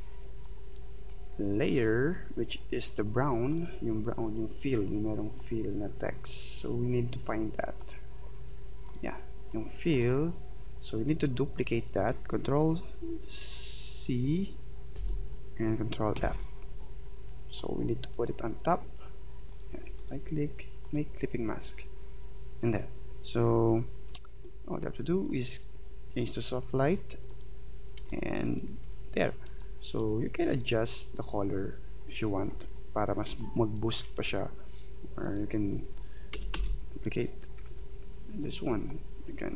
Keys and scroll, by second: 14.9 ctrl+c, 16.2 ctrl+f, 28.0 space, 33.3 space, 36.3 ctrl+c, 36.5 ctrl+f, 37.7 ctrl+z.